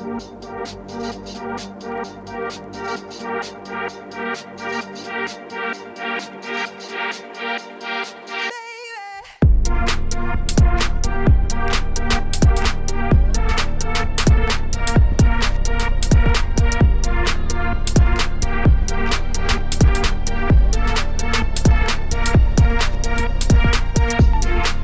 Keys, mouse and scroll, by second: 0.5 shift+click, 0.8 shift+click, 1.1 middle click, 1.6 s, 2.9 click, 3.5 shift+click, 4.1 ctrl+p, 4.3 click, 4.5 click, 4.6 middle click, 4.8 s, 5.8 middle click, 6.6 s, 8.2 middle click, 8.6 g, 10.0 click, 10.0 g, 10.9 middle click, 11.8-12.7 scroll up 1, 12.7 click, 13.2 shift+click, 13.8 ctrl+a, 14.1 click, 14.4-16.6 shift+middle drag, 16.6 click, 16.9-18.4 shift+middle drag, 18.4-18.9 scroll up 5, 18.9 shift+middle click, 19.2 click, 19.9 KP_7, 20.5 z, 20.7 shift+middle click, 21.0 Tab, 21.5 g, 22.1 click, 22.3 g, 24.0 Tab, 24.2 middle click, 24.4 scroll down 1, 24.5 z.